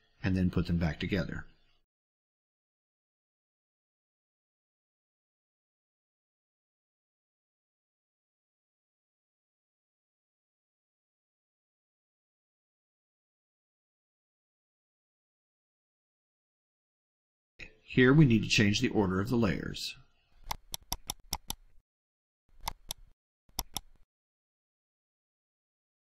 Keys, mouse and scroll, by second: 0.7 click, 1.3-2.2 drag, 4.1 click, 4.6-5.1 drag, 5.5 ctrl+scroll up 2, 5.9 ctrl+middle click, 6.5 click, 7.0 click, 8.1 drag, 8.6-9.0 drag, 9.2 click, 9.7 click, 10.2 click, 10.8 click, 11.4 click, 11.8-12.3 drag, 12.6 middle click, 13.2 click, 13.7 click, 14.5 click, 14.9 click, 15.6 click, 16.3 click, 20.4 click, 21.2 click, 22.5 click, 23.4 click.